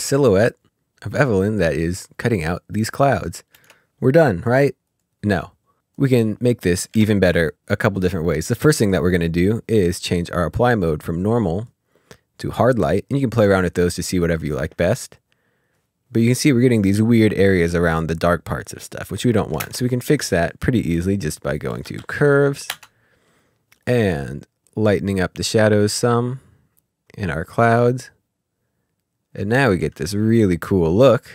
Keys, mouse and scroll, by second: 3.5 space, 5.4 click, 6.9 s, 7.3 click, 11.5 click, 14.6 ctrl+click, 14.8 ctrl+scroll up 1, 15.7 Delete, 18.6 click, 19.6 ctrl+space, 21.7 typing, 22.6 Return, 25.1 Return, 26.9 click, 30.3 ctrl+scroll up 1, 30.9 scroll up 1.